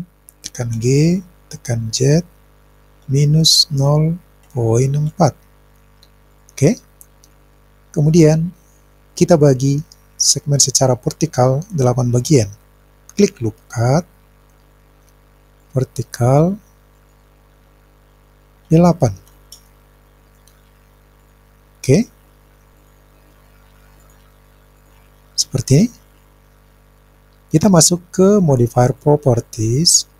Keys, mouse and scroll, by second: 2.0 z, 3.0 KP_Subtract, 3.7 KP_0, 4.5 ., 5.1 KP_4, 6.3 click, 13.2 click, 15.6 click, 16.9-19.6 drag, 21.2 click, 21.9 click, 22.8 click, 24.0 click, 24.8 click, 29.0 click.